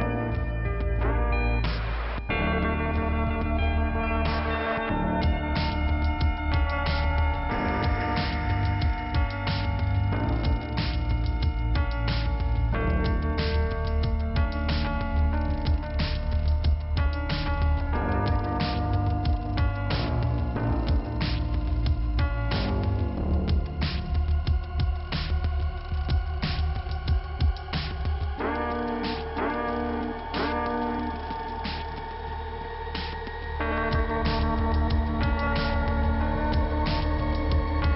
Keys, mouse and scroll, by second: 0.5 right click, 4.2 right click, 4.9 click, 5.5 click, 8.2 click, 9.4 scroll up 1, 11.2 click, 11.8-12.4 scroll up 1, 12.9 click, 14.1 click, 14.7 click, 16.3 click, 16.4 click, 16.8 click, 18.2 click, 19.3 scroll down 1, 20.0 scroll down 1, 23.2 click, 24.8 click, 29.5 scroll up 1, 30.6 scroll down 2, 33.0 click, 33.8 scroll up 2, 34.5 click, 35.9 click.